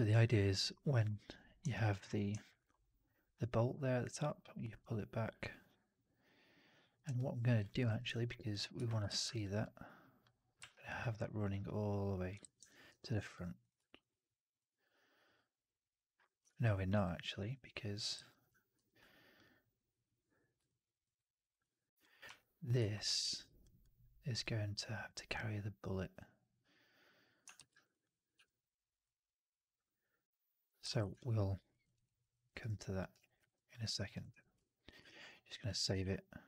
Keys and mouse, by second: 0.0 alt+drag, 0.6 alt+drag, 7.0 alt+click, 7.8 ctrl+z, 8.0 alt+click, 8.6 1, 9.0 shift+x, 9.2 alt+click, 9.5 click, 10.5 w, 12.0 click, 12.3 shift+x, 12.8 4, 13.5 click, 13.7 alt+drag, 15.3-16.3 drag, 16.4 ctrl+z, 16.8 ctrl+z, 18.6 4, 19.3-20.4 drag, 20.6-20.9 alt+middle drag, 21.0-21.4 right drag, 21.5-21.9 drag, 22.2 3, 23.1 shift+x, 23.5-27.3 drag, 27.4 shift+x, 27.6 alt+right click, 27.8 click, 28.2 4, 30.4 click, 30.4 right click, 30.7 ctrl+z, 31.1-31.5 alt+drag, 31.6 alt+middle drag, 31.7 alt+right drag, 31.9 alt+drag, 32.2 middle drag, 32.4 right drag, 32.5-32.9 drag, 33.0 right drag, 33.2 right drag, 33.6 click, 33.7 alt+right drag, 33.9 alt+right drag, 34.1 alt+drag, 34.9 ctrl+s, 35.9 ctrl+s.